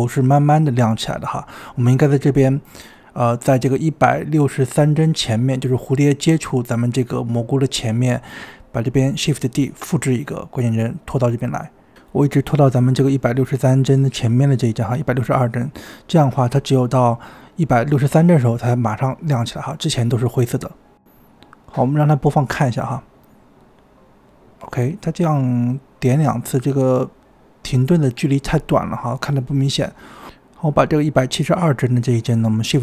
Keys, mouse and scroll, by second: 1.5 space, 2.5-5.8 drag, 8.5 click, 10.1 shift+d, 12.9-14.1 drag, 14.3 click, 14.9-15.6 scroll up 17, 15.6-17.1 drag, 17.6-18.1 drag, 18.1 space, 20.8 space, 21.2 click, 22.5 space, 25.4 space, 27.0-29.5 drag, 32.1 click.